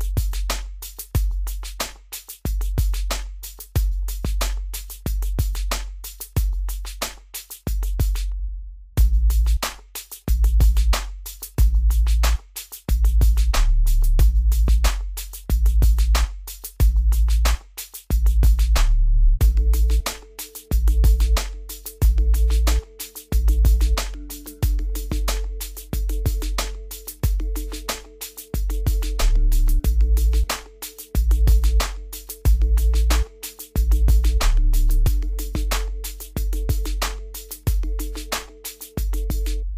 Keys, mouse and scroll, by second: 0.6-1.0 scroll down 1, 2.2 click, 5.2 scroll up 1, 5.4 scroll down 1, 5.8 middle click, 6.7 scroll up 1, 7.8 scroll down 1, 8.1 scroll up 1, 8.3-8.6 scroll down 1, 8.6-10.0 middle drag, 10.0 click, 10.4-11.1 scroll down 1, 12.3 click, 17.8 scroll up 1, 18.6 middle click, 19.2 scroll up 1, 19.5 scroll down 1, 20.4-20.8 scroll up 1, 20.8-21.2 scroll down 1, 21.2 right click, 24.2 click, 27.0 click, 28.1 click, 31.6-32.4 scroll down 1, 33.4 click, 36.5 middle click, 37.0-38.4 scroll up 1, 38.4 click.